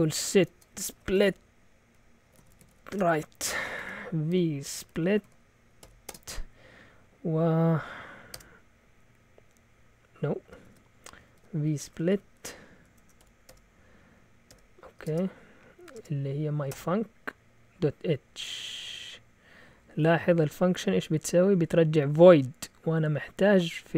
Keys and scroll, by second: 0.0-6.5 typing, 8.0-8.8 typing, 10.4-17.3 typing, 20.6 Right, 20.9 Right, 21.1 Right, 21.2 Right, 21.6 Left, 21.8 Left, 22.0 Left, 22.1 Left, 22.3 Left, 22.9 typing.